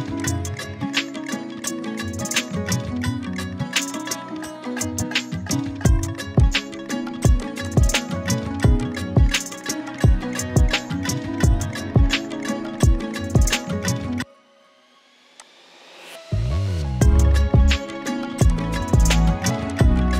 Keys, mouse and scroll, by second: 3.4-4.8 drag, 5.8 z, 6.0 click, 6.3 space, 6.4 click, 7.0 ctrl+z, 7.4 click, 7.5 space, 7.7 click, 9.6 right click, 14.3 right click.